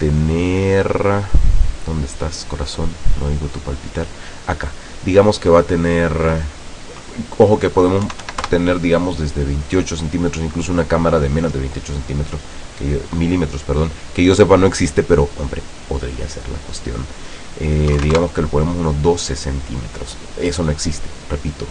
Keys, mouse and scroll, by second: 4.8 click, 8.2 KP_2, 8.5 KP_Enter, 10.6 click, 18.0 KP_1, 18.1 KP_2, 18.2 KP_Enter.